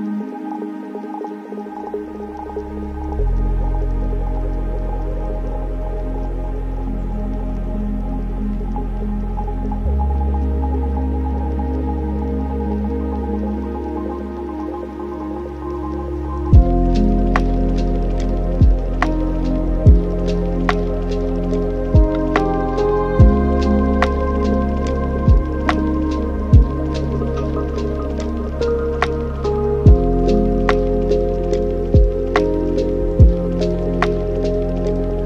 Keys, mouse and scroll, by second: 11.3-23.5 drag, 26.0-30.7 drag, 30.7 n, 31.4-31.9 scroll down 1, 31.9-33.2 middle drag, 33.2 ctrl+right click, 34.0 click.